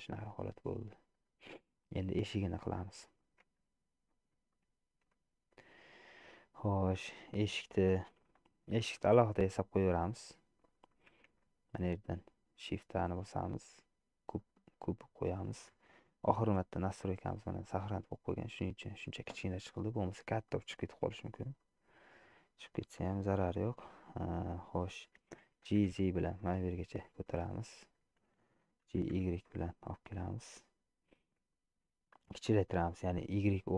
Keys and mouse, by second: 1.7 middle click, 3.6 Tab, 4.6 shift+middle click, 5.7 click, 6.6 middle click, 9.2 Tab, 10.8-14.8 shift+middle drag, 11.3 shift+a, 20.6 middle click, 21.8 middle click, 25.6 g, 29.0 g, 30.7-32.0 middle drag, 33.4 middle click.